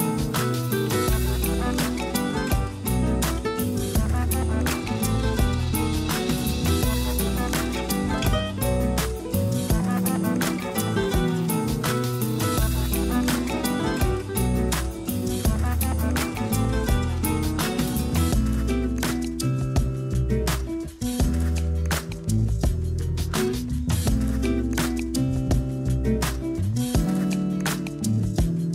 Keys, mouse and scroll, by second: 0.9 r, 2.0 g, 3.2 r, 4.0 g, 4.8-5.3 scroll down 3, 5.0 a, 5.5 Tab, 5.7 scroll down 1, 6.0 a, 6.2 a, 6.7-12.6 shift+middle drag, 12.7-14.0 drag, 14.0 a, 14.2 a, 15.1 shift+a, 18.5-20.3 drag, 20.3-21.2 scroll down 3, 21.2 s, 23.4-24.7 scroll down 2, 24.7 KP_3, 25.5-26.2 scroll down 6, 26.2-28.1 middle drag, 28.1 g.